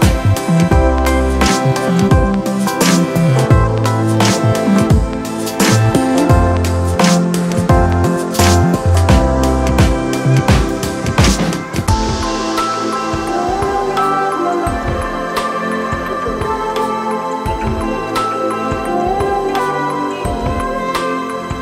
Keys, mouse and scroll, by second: 8.4 ctrl+d.